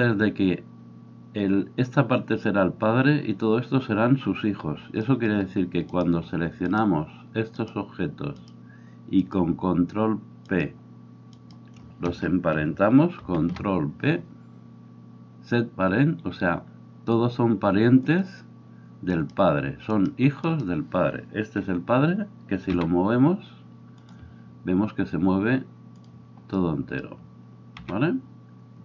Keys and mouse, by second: 8.5 shift+middle click, 8.5 shift+right click, 13.2 ctrl+p, 22.7 g, 25.9 middle click, 26.2-28.8 drag, 27.8 g.